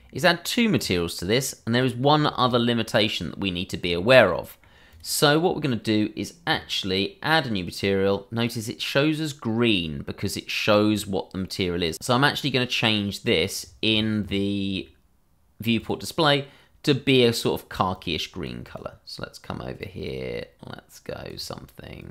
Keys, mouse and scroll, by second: 2.7-3.1 scroll, 3.1 middle click, 3.5 middle click, 4.9 click, 11.9 click, 13.6 scroll down 1, 15.8 click.